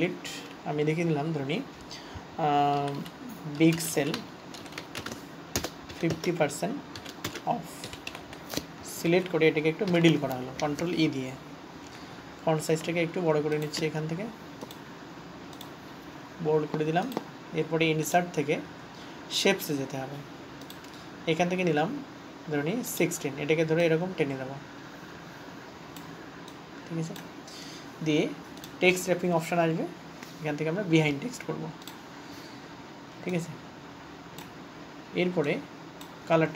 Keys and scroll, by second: 0.0 Delete, 7.4-10.3 typing.